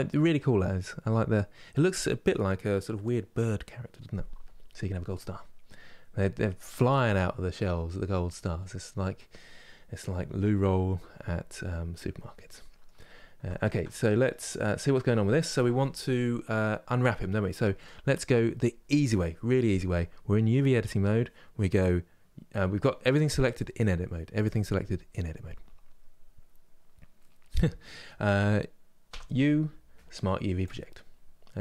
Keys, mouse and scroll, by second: 12.7-13.2 scroll up 4, 13.2-31.6 shift+middle drag.